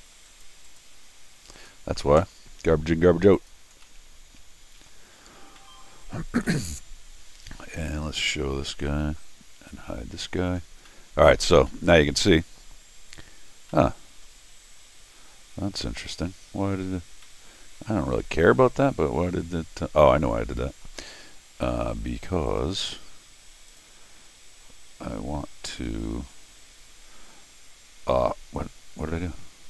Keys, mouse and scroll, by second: 0.3 click, 0.7 click, 1.5 click, 3.4 click, 3.8-4.9 middle drag, 5.6 middle click, 6.5 middle click, 8.2 shift+Tab, 9.6 Tab, 10.6 middle click, 10.9 middle click, 11.7 middle click, 12.9 scroll up 1, 13.6 scroll down 1, 13.7 middle click, 17.1 scroll down 2, 17.2 middle click, 18.1 scroll down 2, 18.7-20.1 middle drag, 20.5 middle click, 22.5 click, 23.7 click, 25.7 click.